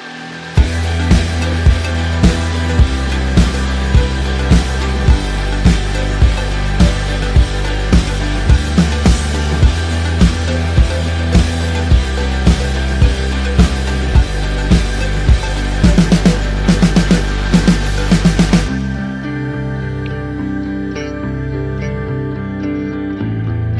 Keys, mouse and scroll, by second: 4.9 click, 18.1 KP_1, 18.6 KP_Enter, 21.4 click, 21.8 ctrl+t, 23.0 alt+click.